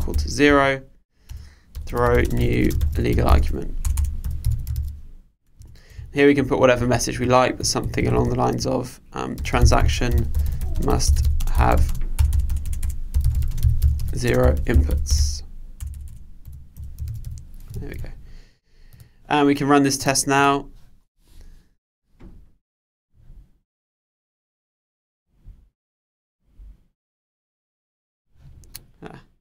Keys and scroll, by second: 5.6 Return, 17.9 super+s.